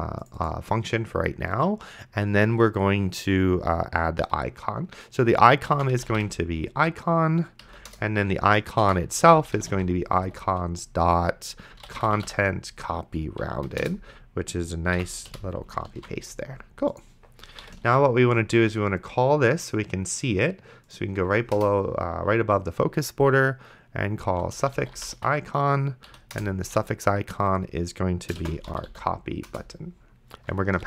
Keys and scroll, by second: 5.7-6.9 typing, 7.6 Down, 7.9 Return, 8.9-12.8 typing, 13.4 Down, 13.8 Return, 15.0 End, 15.3 ;, 16.2 ctrl+s, 17.6 ,, 18.1 ctrl+s, 21.6 Return, 24.1-25.5 typing, 26.1 Down, 26.4 Return, 28.4-29.4 typing, 29.5 Return.